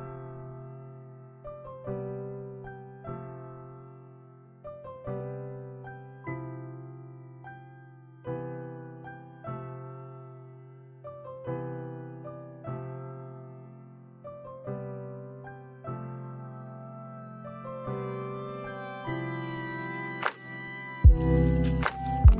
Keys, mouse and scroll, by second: 2.9 middle click, 3.5 space, 3.9-4.4 scroll up 3, 4.4 middle click, 4.7 scroll down 1, 5.2 middle click, 6.4 middle click, 7.3 middle click, 8.4 shift+middle click, 9.2 space, 9.5 middle click, 10.9 middle click, 12.4 click, 14.5-15.1 scroll up 2, 15.1 middle click, 17.1 click, 18.1 middle click, 19.2 click, 20.4 shift+a.